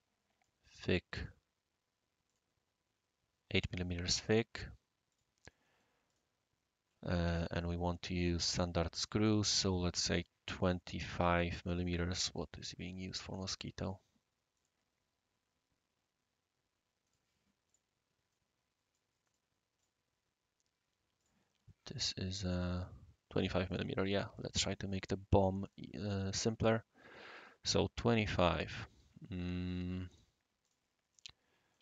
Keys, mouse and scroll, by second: 1.1 click, 2.3 click, 5.1 click, 5.4-6.1 scroll up 1, 6.1 click, 7.4-10.2 right drag, 12.3 click, 13.0 right click, 13.8 click, 14.5 click, 17.0 right click, 17.7 click, 18.3 right click, 19.2 right click, 19.8 click, 21.2 click, 23.7 click, 24.3 click, 25.6 click, 29.6 click, 30.1 click, 30.6 click, 31.1 click, 31.7 right drag.